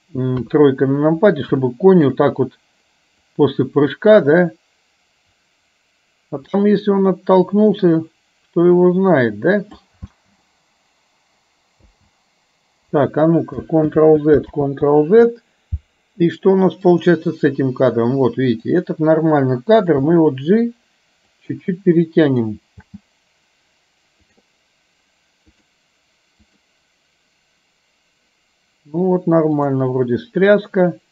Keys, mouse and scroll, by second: 0.6 KP_3, 1.7-2.2 shift+middle drag, 3.3-10.0 drag, 10.1 space, 12.0 space, 14.0 ctrl+z, 14.8 ctrl+z, 17.0 click, 18.7 click, 22.3 click, 23.0 space, 24.3 click, 25.6 click, 26.6 click, 29.7 click.